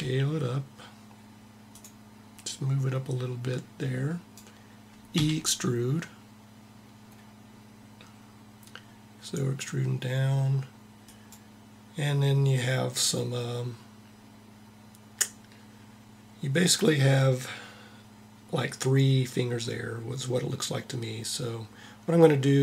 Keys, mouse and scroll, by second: 2.1-4.0 drag, 4.8 e, 12.6-14.1 middle drag.